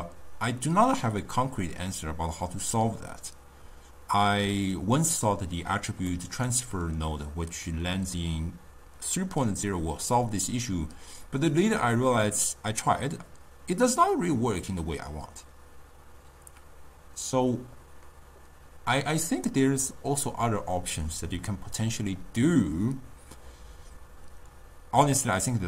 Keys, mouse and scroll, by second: 6.1-9.2 middle drag.